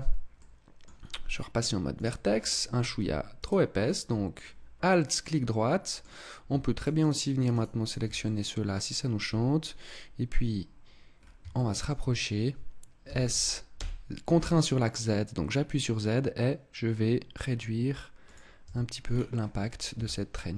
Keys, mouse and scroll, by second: 0.3 middle click, 1.9 click, 2.4-3.4 scroll up 2, 3.4 alt+right click, 4.4 middle click, 6.8 shift+right click, 7.0 shift+right click, 7.6 shift+right click, 7.8 shift+right click, 8.2 middle click, 11.1-11.7 scroll up 2, 11.5 shift+middle click, 12.2 scroll up 2, 13.1 s, 18.4 click, 18.6 Tab, 18.9-19.3 scroll down 8, 19.9 KP_0.